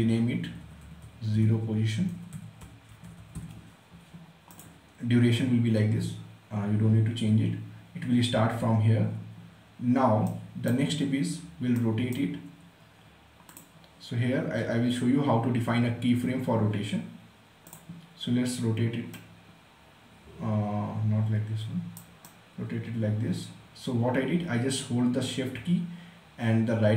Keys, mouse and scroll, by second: 0.4-3.7 typing, 4.3 click, 10.1-13.3 right drag, 13.3 click, 17.4 click, 18.9-26.9 shift+right drag.